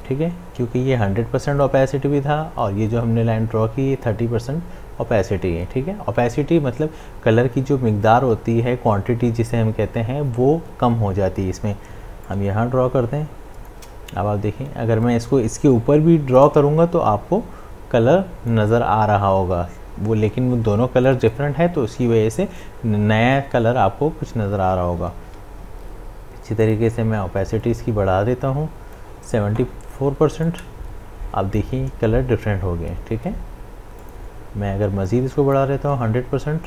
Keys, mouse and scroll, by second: 12.3-16.5 drag, 16.5-21.3 drag, 27.9-36.6 drag.